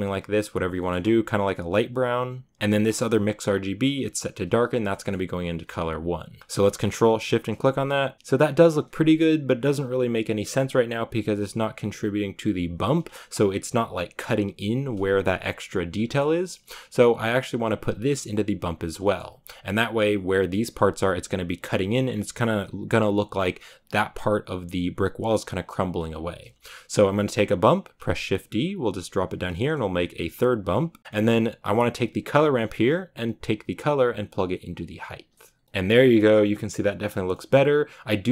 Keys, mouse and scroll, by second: 2.2 click, 6.4-7.2 shift+middle drag, 7.2 ctrl+shift+drag, 8.1 scroll down 1, 13.0-13.3 shift+middle drag, 13.3 scroll up 2, 15.9-17.1 shift+middle drag, 17.1-27.8 drag, 27.8 shift+d, 29.3 scroll down 1, 29.4-31.0 middle drag, 31.0-36.0 drag, 36.0 shift+middle click.